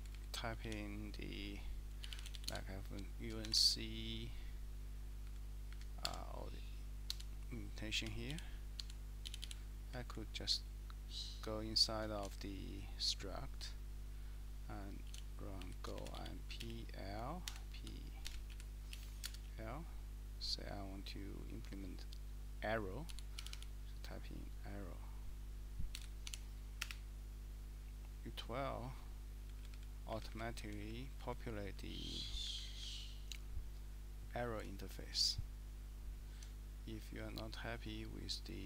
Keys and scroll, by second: 0.0 Down, 0.1 Down, 0.6 a, 2.0-3.4 typing, 5.4 Down, 5.7 Up, 6.0 Tab, 7.1 Escape, 7.7-9.7 typing, 9.8 Up, 10.0 Up, 10.4 Up, 10.7 Right, 12.3 :, 14.9-19.2 typing, 23.0-24.0 typing, 25.8-27.5 typing, 29.5 Down, 29.6 Down, 29.7 Down, 30.1 Up, 30.3 Up, 30.6 Down, 30.8 Down, 31.2 Up, 31.7 Down, 31.9 Down, 32.1 Down, 32.4 Up, 32.8 Up, 34.4 Up, 36.9 Right, 37.0 Right, 37.2 Right, 37.4 Right, 37.7 Right.